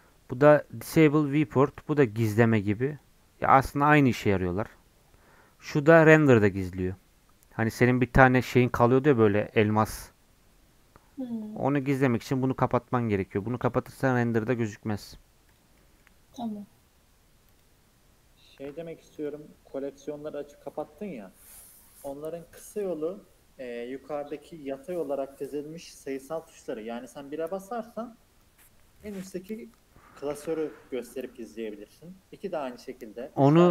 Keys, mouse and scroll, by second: 11.4-15.7 drag, 15.7 scroll down 2, 15.8 middle click, 16.2 scroll up 2, 17.5 click, 18.3-19.2 scroll down 1, 19.2-22.2 drag, 29.0-32.0 drag.